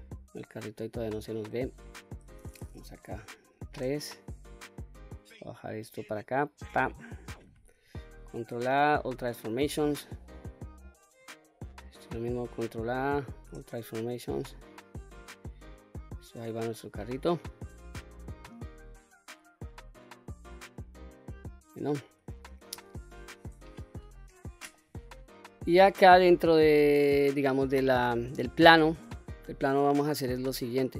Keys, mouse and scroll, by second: 1.6 click, 2.6 KP_3, 4.1 click, 7.9 ctrl+a, 9.7-11.0 scroll up 2, 11.0 click, 12.9 ctrl+a, 14.7 click, 15.6 click, 16.1-16.5 scroll down 2, 16.5-21.5 middle drag, 21.8-22.2 scroll up 2, 22.2-22.5 scroll down 2, 22.7-23.2 shift+middle drag, 23.4-23.9 scroll up 2, 23.9-24.4 middle drag, 24.8-25.4 scroll down 3, 25.4-25.7 middle drag, 26.0-26.5 middle drag, 26.7-27.6 scroll down 1, 27.6 middle click, 28.4 middle click.